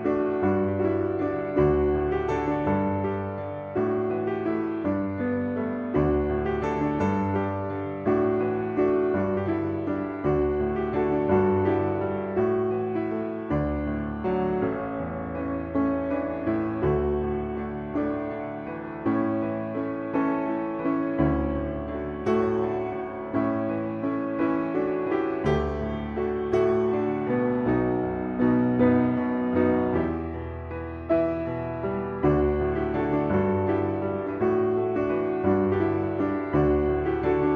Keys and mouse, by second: 0.8-2.8 drag, 3.5 shift+middle click, 4.0 click, 4.6-6.2 drag, 6.7 click, 7.3-9.9 drag, 11.6-13.0 drag, 13.6 click, 13.9-16.1 drag, 17.8 shift+middle click, 19.0 click, 20.2 click, 21.1 click, 22.2 click, 22.8 click, 23.1-24.6 drag, 25.5 click, 28.1 click, 30.0 shift+middle click, 31.5 shift+middle click, 32.2 ctrl+s, 34.8 click, 35.2 shift+middle click.